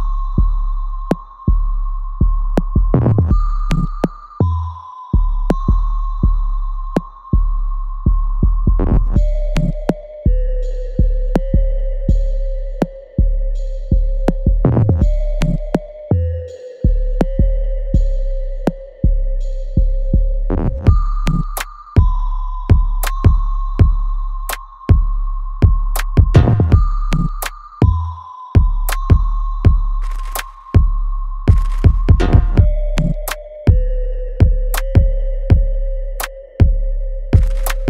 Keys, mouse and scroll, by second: 1.9 click, 5.1 click, 5.3-6.9 alt+right drag, 6.9 alt+middle click, 7.4 right click, 8.2 click, 8.5 alt+right click, 9.3 alt+middle click, 9.7 alt+right click, 10.6 right click, 11.8 click, 13.0 shift+click, 14.3-15.6 right drag, 15.6 ctrl+z, 16.0 click, 16.1 alt+click, 16.8-18.4 alt+middle drag, 18.4-20.0 right drag, 20.4 alt+click, 22.9 ctrl+z, 23.4 shift+click, 24.7 alt+right click, 25.5 shift+click, 26.8-29.1 alt+drag, 29.1 click, 30.5 alt+right click, 31.0-32.3 alt+drag, 32.3 ctrl+b, 33.0-34.6 alt+right drag, 34.6 click, 35.5-37.8 drag.